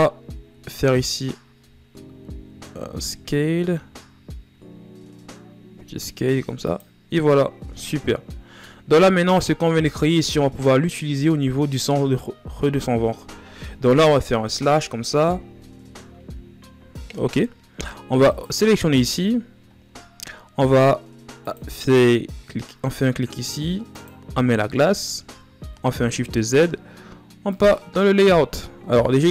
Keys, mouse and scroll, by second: 1.2 a, 1.9 a, 2.5 a, 7.0 scroll down 3, 17.9 right click, 18.8 shift+scroll down 4, 19.4 shift+scroll up 1, 21.7-24.5 drag, 24.5-25.3 middle drag, 25.3 shift+z, 25.7 ctrl+scroll down 2, 27.1-29.3 drag.